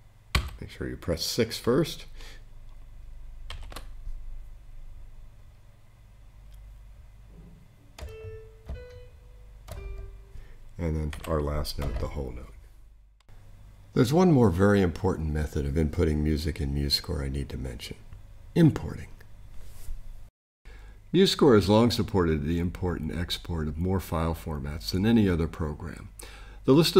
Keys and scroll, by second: 0.3 super+6, 3.5 super+3, 11.1 7.